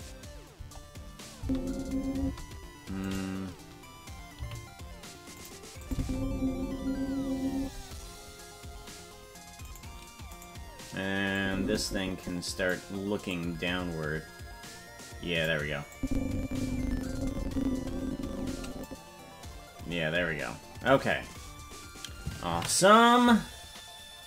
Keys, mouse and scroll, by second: 0.5 KP_0, 1.4 space, 2.2 space, 3.0 right click, 4.3 g, 5.8 click, 5.9 space, 7.6 space, 9.7 right click, 10.4 right click, 11.3-12.7 drag, 13.3-15.4 drag, 15.9-18.9 drag, 19.8-20.4 scroll up 5.